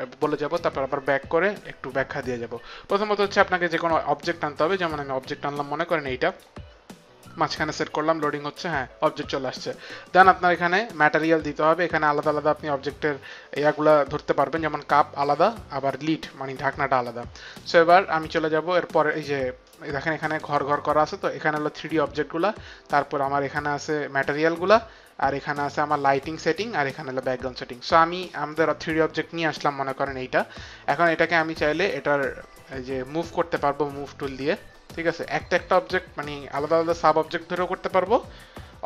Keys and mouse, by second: 4.5 click, 12.0 click, 14.5 click, 15.9 click, 19.1 click, 22.4 click, 24.7 click, 26.5 click, 28.5 click, 34.0 click, 36.8 ctrl+z.